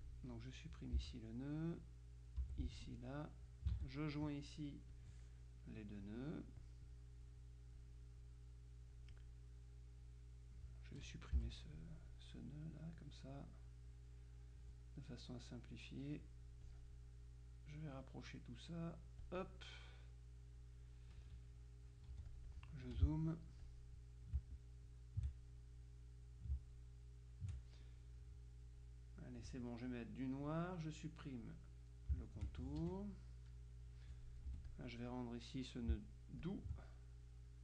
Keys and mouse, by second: 0.2 ctrl+click, 1.1 Delete, 1.7-3.0 drag, 2.6 Delete, 3.2-4.6 drag, 3.8 ctrl+z, 5.0 click, 6.2-7.2 drag, 7.4 click, 10.1-11.6 drag, 11.5 Delete, 12.2-13.5 drag, 15.8-16.8 drag, 17.8-19.9 drag, 20.0-21.2 drag, 22.2 z, 22.4 click, 23.0 F2, 23.7 click, 24.5-25.7 ctrl+shift+drag, 25.9 click, 28.8-29.9 drag, 30.5 click, 31.5 click, 32.3 shift+click, 32.8 shift+F1, 34.6 F2, 34.8 click, 36.6 ctrl+click, 37.4-37.6 drag.